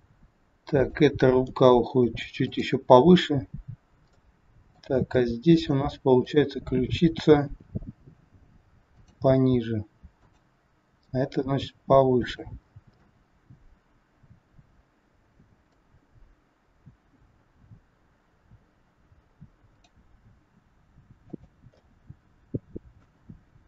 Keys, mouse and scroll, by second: 0.7 click, 1.5 g, 4.1 middle click, 6.2 middle click, 6.2 click, 7.3 r, 10.1 click, 11.0 r, 12.7-13.1 scroll down 2, 13.1 middle click, 16.1 scroll up 4, 19.7 click, 20.3 r, 21.7 middle click, 23.3 scroll down 3.